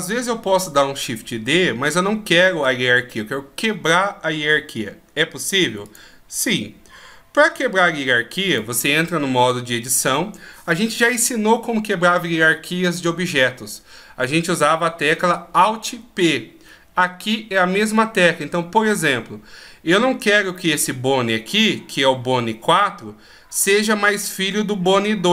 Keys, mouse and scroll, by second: 5.9 click, 8.6 click, 20.8 right click, 23.6 right click.